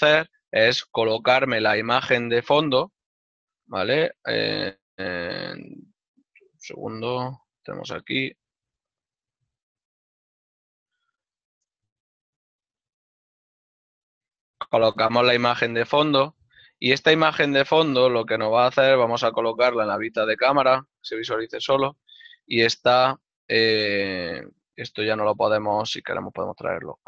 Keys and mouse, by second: 1.4 middle click, 3.7 click, 9.8 click, 11.7 v, 12.0 Return, 15.1 click, 22.5 ctrl+middle click, 24.6 click.